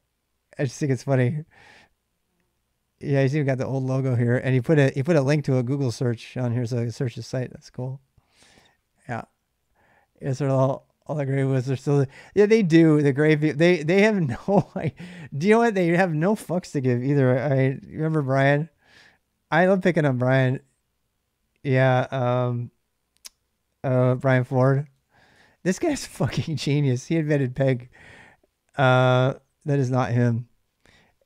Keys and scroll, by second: 16.9-18.0 typing, 24.5-25.6 typing.